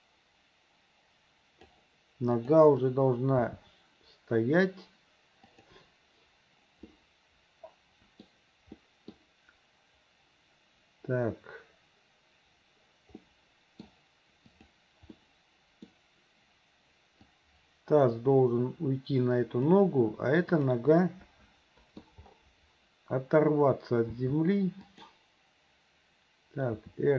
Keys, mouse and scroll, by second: 2.4 click, 3.4 g, 6.9-7.3 scroll up 1, 7.3-8.3 middle drag, 8.9 middle click, 9.2-9.6 scroll down 1, 13.2-13.9 middle drag, 14.5 click, 15.2-15.9 middle drag, 17.6-19.8 drag, 21.0-22.1 middle drag, 24.2 g, 26.8 r.